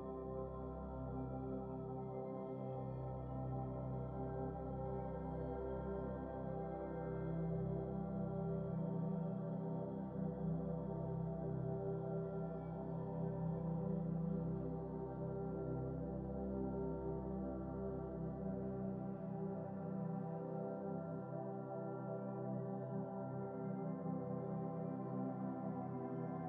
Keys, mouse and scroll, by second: 2.0-4.2 drag, 4.3 click, 4.9 x, 6.0 ctrl+v, 6.5 scroll up 3, 6.8-8.1 scroll down 3, 8.1-8.4 scroll down 1, 9.1-10.5 middle drag, 10.5 KP_Decimal, 11.1-13.6 middle drag, 13.6-14.2 scroll down 6, 14.2-16.8 middle drag, 17.1-18.8 drag, 18.8-19.7 scroll up 8, 20.9-22.5 drag, 23.0-23.6 scroll up 3, 23.6-25.7 middle drag, 25.8 click.